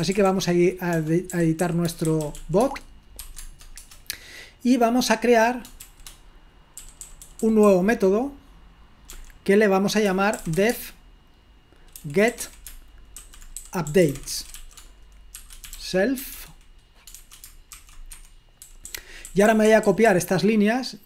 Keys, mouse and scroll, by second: 0.0-3.2 typing, 3.4 Tab, 3.7 Return, 6.9-8.2 typing, 9.2-20.0 typing, 18.2 Escape.